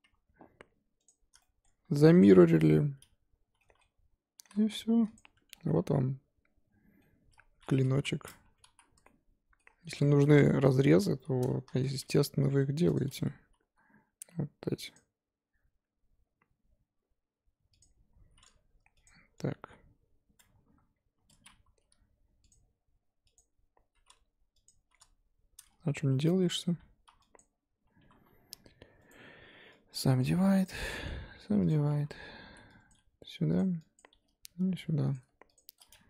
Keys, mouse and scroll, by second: 0.0 2, 1.0 click, 1.4 shift+middle click, 2.2 ctrl+click, 2.4-3.4 middle drag, 3.4 scroll down 1, 3.6 middle click, 4.3 e, 5.3 Tab, 5.5 scroll down 1, 5.6-7.3 middle drag, 7.3-7.9 scroll up 2, 7.9 KP_1, 8.4 Tab, 8.7 z, 9.0 shift+middle click, 9.7-10.0 scroll up 2, 10.0 shift+middle click, 10.2-11.7 scroll up 2, 11.7 1, 12.1 click, 12.3 g, 13.1-13.8 scroll up 1, 13.8 k, 21.8 k, 25.5-27.0 scroll up 4, 27.0 2, 27.3 click, 28.0 1, 28.4 2, 29.9 right click, 30.6 click, 31.7 right click, 31.9 1, 32.5 z, 32.9 click, 33.1 g, 34.0 click, 34.1 g, 35.5 shift+click.